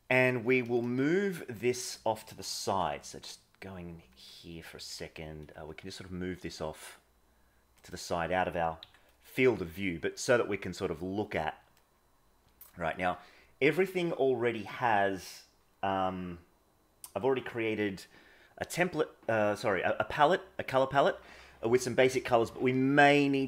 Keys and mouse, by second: 2.7 KP_0, 4.8 g, 8.7 KP_1, 9.6-11.8 middle drag.